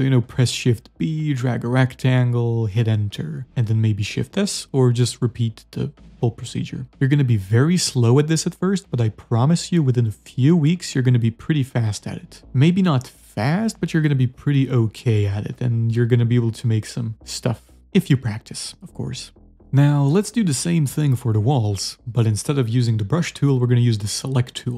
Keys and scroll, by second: 0.4 shift+b, 2.7 Return, 4.7 shift+s, 6.1 z.